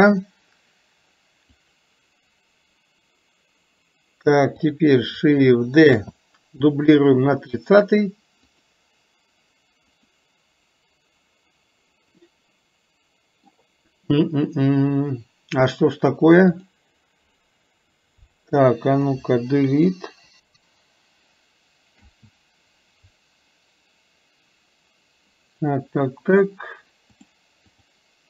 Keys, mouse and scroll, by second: 1.8 click, 4.6 click, 10.0 click, 12.2-13.6 middle drag, 16.6 click, 18.7 click, 27.4 click.